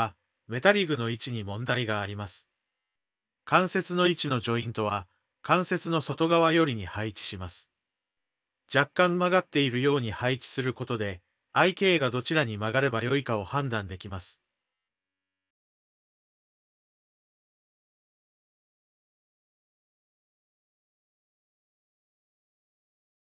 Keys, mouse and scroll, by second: 1.4 ctrl+z, 1.6 ctrl+z, 1.8 ctrl+z, 2.0 ctrl+z, 3.6 shift+click, 5.6 Tab, 6.4 click, 7.3 click, 7.9 click, 9.5 g, 10.9 click, 11.3 g, 12.8 click, 13.3 g, 14.6 click, 15.0 g, 16.6-20.2 d, 17.1 click, 20.5 click, 21.7 d, 21.8 click, 22.3 click, 22.8 shift+click, 23.1 click.